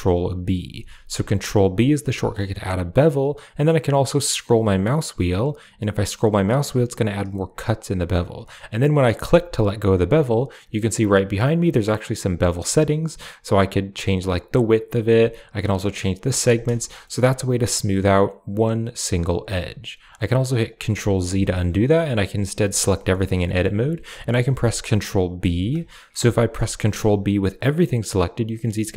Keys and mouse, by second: 0.5 ctrl+b, 0.7 ctrl+b, 10.4 click, 12.0 click, 13.5-14.8 drag, 15.2-16.3 drag, 16.7 shift+middle click, 16.9 middle click, 19.9 click, 21.1 ctrl+z, 22.4 a, 22.7 a, 22.9 shift+middle click, 23.3 click, 25.3 ctrl+b.